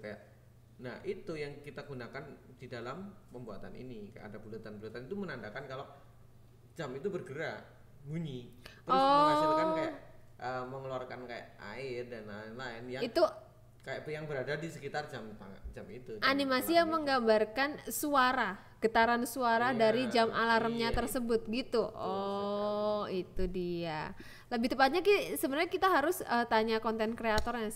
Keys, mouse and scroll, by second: 0.8 click, 1.4 KP_0, 2.5 g, 2.9 z, 3.9 click, 4.5-5.7 drag, 6.5-8.9 drag, 7.4 KP_0, 8.9 KP_0, 9.2 KP_7, 10.0 shift+d, 11.0 click, 11.6 shift+d, 13.7 click, 14.1 KP_0, 15.1-17.0 drag, 15.8 KP_0, 17.8 click, 18.4-22.2 drag, 19.2 KP_0, 21.2 KP_0, 22.7 click, 23.4-25.7 drag, 23.9 KP_0, 24.2 BackSpace, 24.8 KP_0.